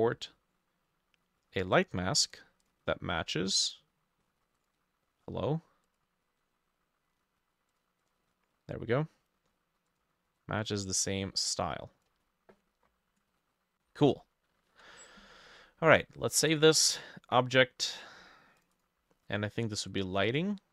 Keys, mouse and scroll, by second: 2.7-4.7 drag, 8.1 double click, 14.7 ctrl+s, 18.8 double click, 20.3 double click.